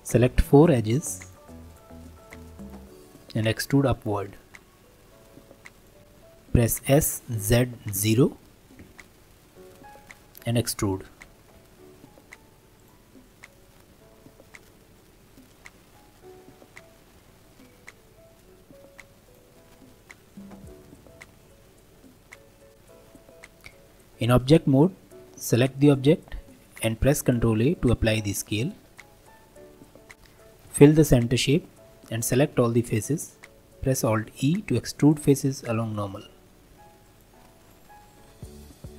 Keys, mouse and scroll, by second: 1.2 shift+click, 1.7 shift+click, 2.2 shift+click, 2.6 shift+click, 4.5 e, 6.0-6.9 scroll up 1, 6.9 s, 9.6-10.7 scroll down 1, 11.5 e, 13.1-14.0 scroll down 3, 14.0 alt+middle click, 14.7 scroll up 2, 15.0-17.2 shift+middle drag, 17.2 g, 19.5-20.9 middle drag, 20.9 e, 22.7 click, 25.5 click, 25.9 middle click, 26.7 ctrl+a, 29.6 Tab, 30.1 middle click, 30.7 f, 31.2-32.3 shift+middle drag, 32.3 a, 34.0 alt+e, 37.6 click, 38.0 middle click, 38.5 Tab.